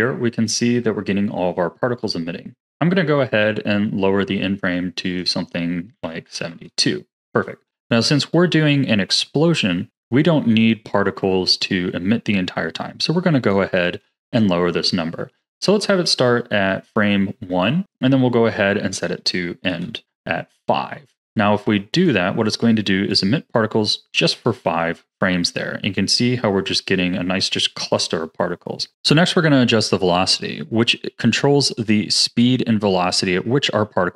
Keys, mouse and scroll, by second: 5.0-7.7 drag, 7.9-11.5 drag, 18.8-21.5 drag, 21.9-26.1 drag, 30.1-30.5 scroll up 1, 31.1-34.1 drag.